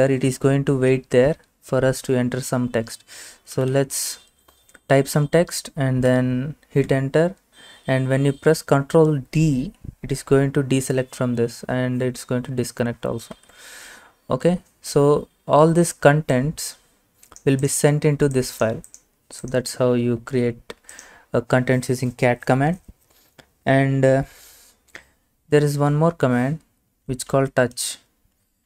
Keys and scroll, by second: 3.3-4.3 typing, 6.9 Return, 13.4 ctrl+d, 20.4 alt+Tab, 26.5-28.3 typing.